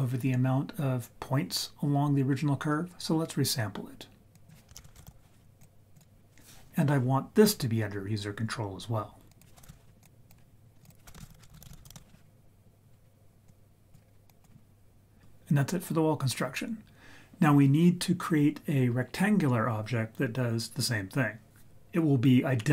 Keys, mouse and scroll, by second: 4.3 click, 4.7 shift+a, 9.3-10.2 drag, 10.8-11.9 shift+drag, 13.4 click, 14.2 click.